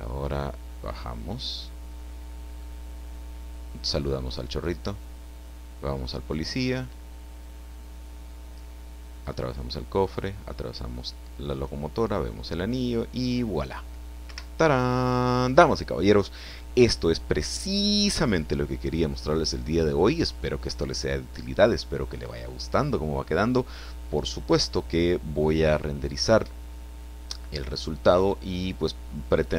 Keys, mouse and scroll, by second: 14.3 Escape.